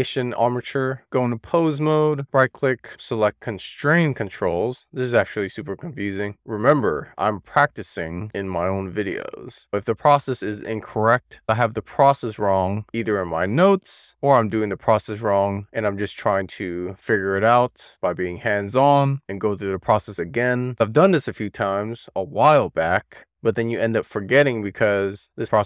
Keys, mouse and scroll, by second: 1.3 click, 2.1-5.4 right drag.